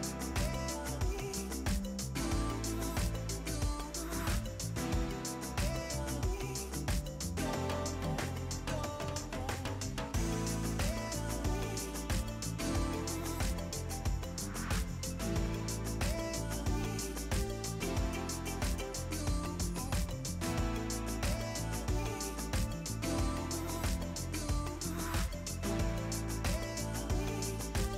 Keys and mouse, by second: 1.1 s, 2.4 KP_1, 2.9 Return, 3.5 click, 3.7 s, 3.9 click, 4.6 KP_1, 4.7 Return, 5.2 click, 5.5 s, 5.7 ctrl+click, 6.2 KP_1, 7.4 Return, 8.6 click, 8.8 click, 9.5 Delete, 10.5 click, 11.1 click, 12.3 KP_1, 12.8 Return, 14.6 click, 15.4 ctrl+1, 16.2 1, 16.6 1, 20.6 click, 21.1 ctrl+click, 21.5 right click, 22.0 click, 23.4 click, 24.3 KP_3, 24.6 Return, 25.1 click, 25.9 click.